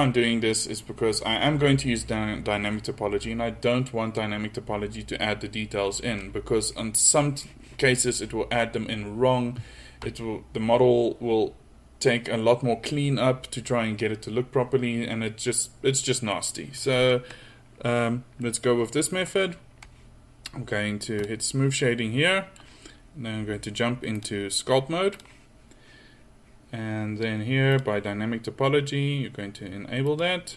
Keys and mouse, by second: 18.5-18.9 middle drag, 19.2 middle click, 22.3 middle click, 25.2 typing, 27.7-30.1 drag.